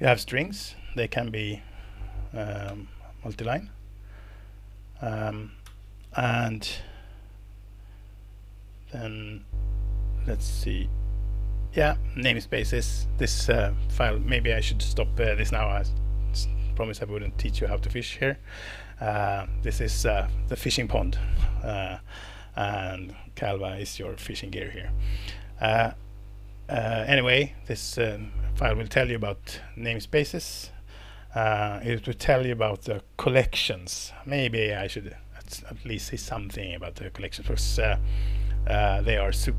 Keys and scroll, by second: 2.7 alt+Return, 5.6 Escape.